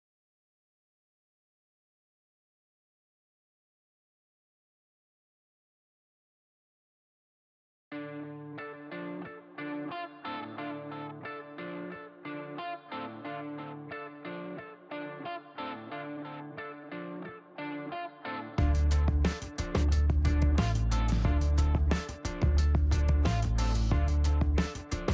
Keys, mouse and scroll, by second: 0.1 scroll up 2, 1.6 click, 4.3 click, 5.5 click, 8.1 KP_Subtract, 8.5 KP_1, 8.9 KP_Enter, 12.8 shift+right click, 14.1 click, 15.4 shift+right click, 16.1 shift+middle click, 16.9 middle click, 17.2 scroll down 1, 19.3 click, 21.2 click, 21.8 click, 22.4 click, 24.4 click.